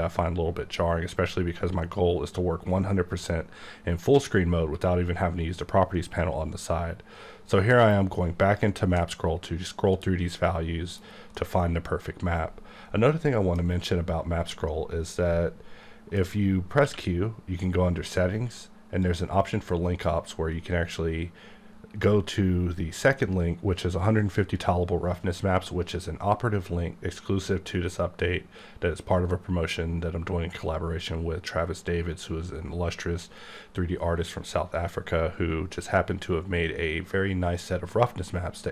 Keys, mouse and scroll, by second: 0.8-2.6 scroll up 1, 2.9 scroll up 1, 4.4-5.5 scroll up 1, 5.5-6.1 scroll up 2, 8.4 click, 9.1 middle click, 11.3 middle click, 16.2 alt+m, 16.8 q, 19.0 click, 20.5-22.1 scroll up 1.